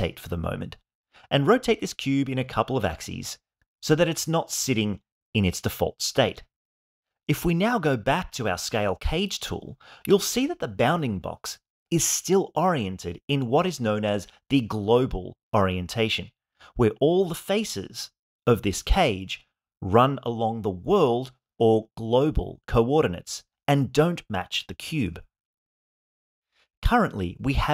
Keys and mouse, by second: 0.9-1.9 drag, 2.7 click, 3.6 click, 5.8-7.8 drag, 9.0-11.2 drag, 12.2 click, 17.6 click, 18.0-20.7 drag, 21.5-23.6 drag, 25.1-27.6 drag.